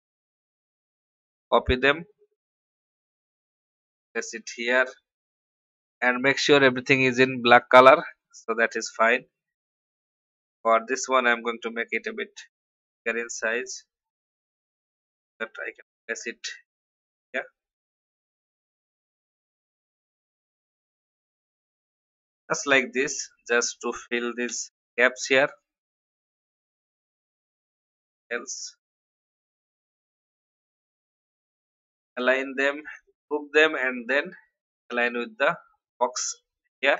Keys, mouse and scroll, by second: 0.2 ctrl+c, 0.9 click, 1.8 ctrl+v, 4.7-11.1 drag, 11.4 shift+click, 12.8-14.1 drag, 15.7 ctrl+r, 16.9 click, 18.4 shift+click, 20.9 shift+Down, 21.1 shift+Down, 21.3 shift+Down, 22.7 alt+click, 24.6 ctrl+r, 25.4 click, 26.3 shift+Right, 28.1 shift+click, 28.7 shift+click, 29.4 shift+click, 30.5 click, 31.7 ctrl+g, 33.0 shift+click, 33.7-36.9 drag.